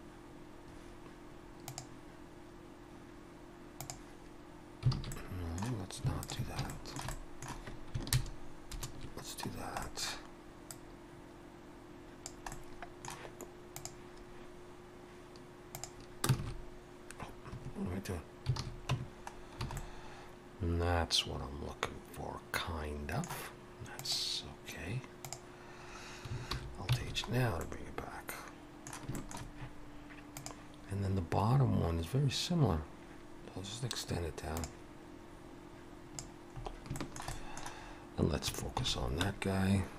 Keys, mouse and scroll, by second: 5.0 alt+a, 5.1 middle click, 6.2 alt+shift+click, 6.7 shift+middle click, 7.1 middle click, 8.1 ctrl+KP_Add, 8.7 ctrl+KP_Add, 9.5 scroll down 1, 9.8 middle click, 10.7 click, 12.5 middle click, 16.3 alt+space, 16.4 alt+s, 18.6 alt+a, 18.9 Tab, 19.3 scroll down 2, 19.6 alt+a, 19.8 middle click, 26.5 alt+h, 27.0 alt+a, 27.3-27.7 scroll down 3, 27.6 middle click, 29.2 shift+middle click, 34.6 Escape, 34.6 scroll down 4, 34.9 click, 36.6 scroll up 3, 37.0 shift+middle click, 37.3 middle click, 38.8 shift+h, 39.3 1.